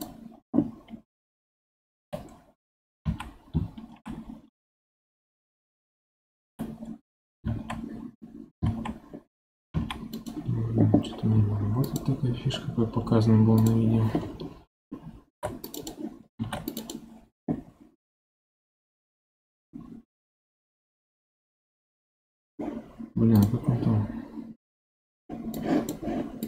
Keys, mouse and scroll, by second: 1.9 g, 11.3 2, 11.8 click, 12.3 x, 15.2 ctrl+r, 16.3 ctrl+r.